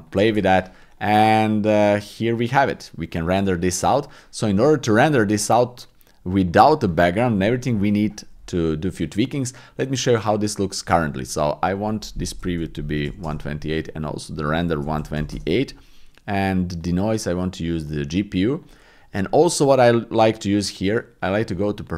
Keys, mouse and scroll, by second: 0.1 click, 0.9 click, 11.7-13.2 drag, 14.5 click, 16.8 click, 17.8 click, 18.5 click, 21.4 click.